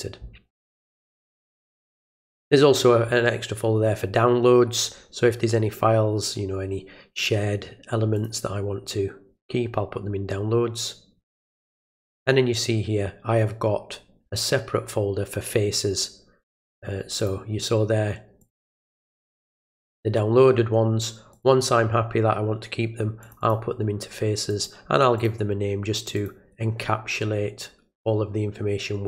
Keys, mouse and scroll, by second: 1.5 click, 1.6 click, 8.2 click, 12.0 click, 12.2 click, 17.2 click, 18.4 click, 19.0 click, 19.2 click, 21.3 click, 23.2 click, 23.4 click, 24.5 click, 25.2 click, 26.0 click, 26.2 click.